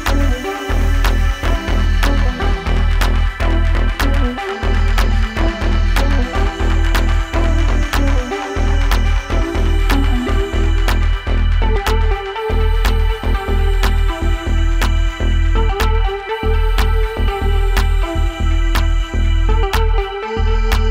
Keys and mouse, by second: 0.0 click, 0.8 F4, 5.9 click, 6.8 click, 7.0 click, 7.7 click, 8.6 drag, 9.8 drag, 10.6 click, 12.0 click, 17.4 drag, 19.5-20.9 drag.